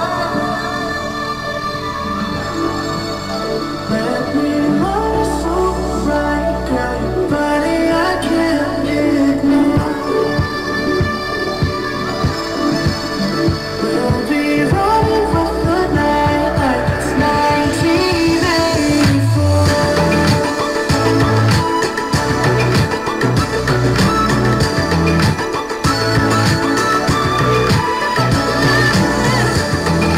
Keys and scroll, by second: 11.3 ctrl+BackSpace.